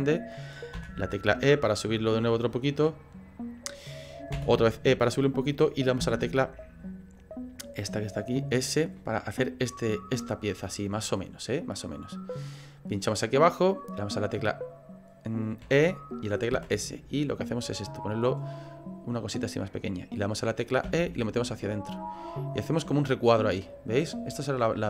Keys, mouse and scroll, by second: 9.0 middle click, 9.0 s, 18.2 middle click, 18.2 e, 20.8 e, 22.8 middle click, 22.8 e, 23.3 right click, 23.6 middle click.